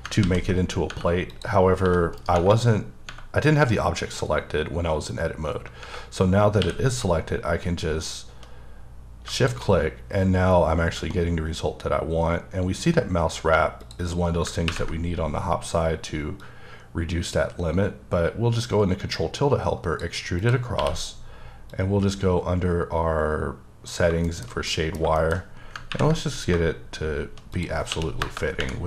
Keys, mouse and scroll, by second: 0.2 ctrl+z, 0.7 scroll down 1, 1.3 click, 1.8 g, 2.2 right click, 6.6 q, 9.2 shift+q, 9.4 shift+Num_Lock, 9.4 shift+click, 13.8 click, 16.4 click, 20.4 click, 21.7 click, 24.3 shift+middle click, 25.4-25.9 scroll up 3, 27.5 click, 27.9 2, 28.2 KP_Enter.